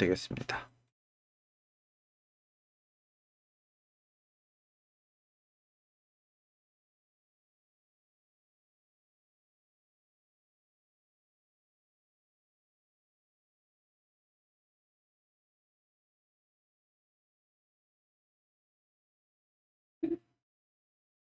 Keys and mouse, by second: 2.7 shift+click, 3.4 ctrl+click, 4.1-5.7 drag, 6.0 shift+click, 7.3-9.2 drag, 9.9-12.9 drag, 13.3 ctrl+middle click, 13.8 middle click, 14.3 shift+middle click, 15.0 middle click, 16.0 shift+middle click, 16.6-19.1 middle drag, 19.6-21.2 drag.